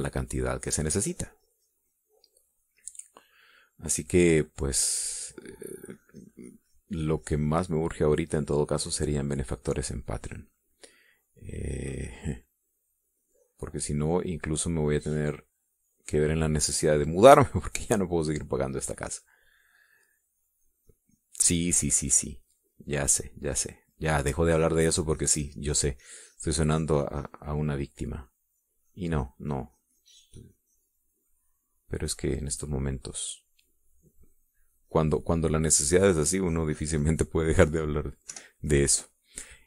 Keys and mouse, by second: 4.5 middle click, 6.2-13.5 drag, 13.7-24.2 drag, 24.4 middle click, 25.4-29.3 drag, 30.2-39.3 drag.